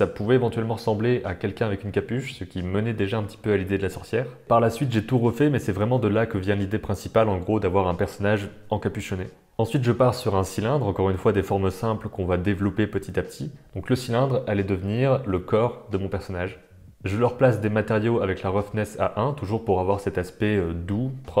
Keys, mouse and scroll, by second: 0.7 click, 1.9 g, 2.7 click, 3.1 g, 3.4-4.4 middle drag, 4.4 e, 4.4 s, 4.6 e, 5.3 s, 5.6 middle click, 6.4 click, 6.5 middle click, 8.1 shift+click, 8.4 s, 10.3 shift+click, 11.1 g, 11.4 middle click, 12.6 Tab, 13.0 click, 13.5-15.3 typing, 15.7 Tab, 16.7 click, 17.1 click, 18.7 shift+click, 19.7 click.